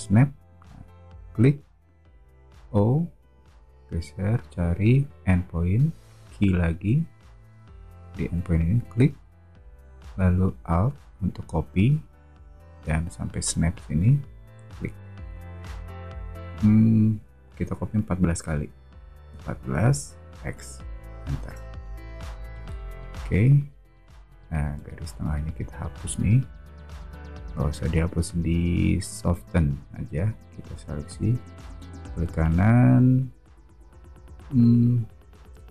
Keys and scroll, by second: 2.6 o, 6.5 q, 19.3-20.3 typing, 21.4 Return, 22.5 space.